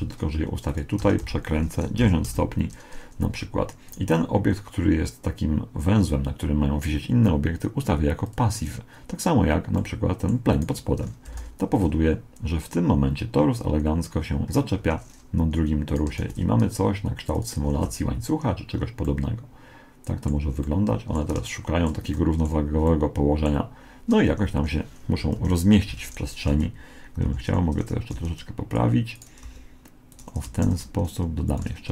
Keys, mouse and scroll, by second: 1.1 r, 3.9 right click, 8.3-10.2 drag, 10.2 middle click, 10.5-11.5 drag, 11.3 alt+a, 11.5 right click, 14.9 Escape, 15.9 right click, 16.2 shift+d, 17.7 alt+a, 19.1-24.7 middle drag, 24.4 Escape, 25.3 KP_7, 26.5 x, 27.3 z, 28.1 g, 29.2 right click, 30.7 shift+d, 31.7 r.